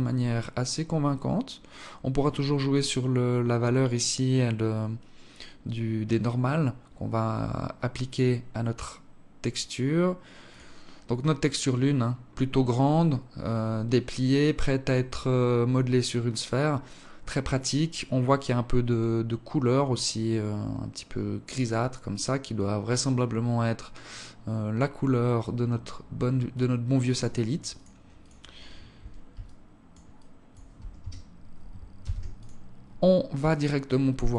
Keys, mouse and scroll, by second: 28.0 click, 29.2 alt+click, 29.9 alt+click, 31.8 ctrl+s, 33.3 alt+click.